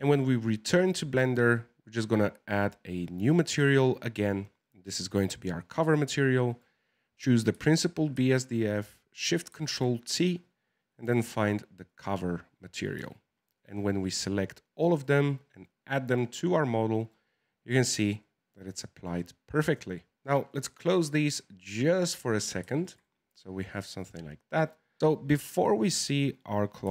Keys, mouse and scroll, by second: 2.5 click, 3.4-5.8 drag, 6.4 click, 9.5 ctrl+shift+t, 16.7-20.4 middle drag, 20.4-22.4 drag, 22.4-22.8 scroll down 3, 22.8-25.0 shift+middle drag, 25.0-26.0 drag.